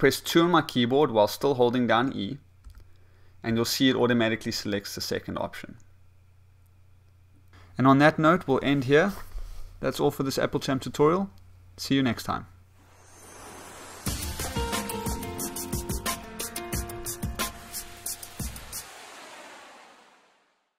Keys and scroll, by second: 2.6 2, 3.9 2.